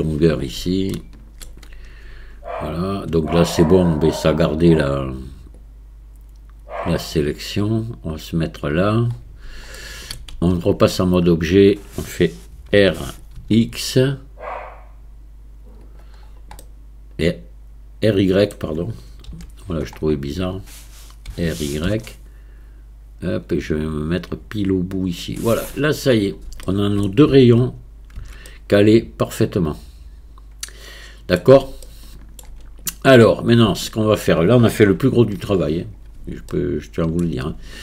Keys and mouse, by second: 0.9-1.4 shift+middle drag, 1.7 Tab, 5.6-8.7 drag, 9.8 shift+middle click, 10.4 Tab, 12.7 r, 16.6-18.5 middle drag, 19.3 KP_1, 21.3 r, 26.6 shift+middle click, 27.3 Tab, 28.2 Tab, 28.5-31.4 middle drag, 31.9-32.4 shift+middle drag, 32.8 click, 33.9 shift+middle click, 35.0 KP_1, 36.5-37.2 shift+middle drag.